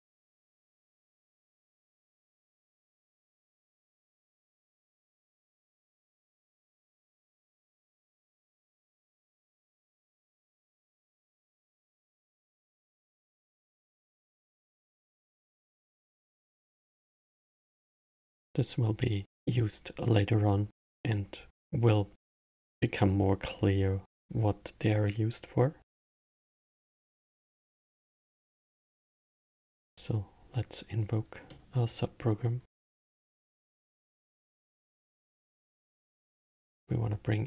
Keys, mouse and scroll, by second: 8.5-11.6 drag, 17.0-18.6 middle drag, 18.6 click, 21.7-24.8 drag, 26.5-29.5 drag, 31.5-32.4 middle drag, 32.4-35.5 drag, 36.5 shift+a.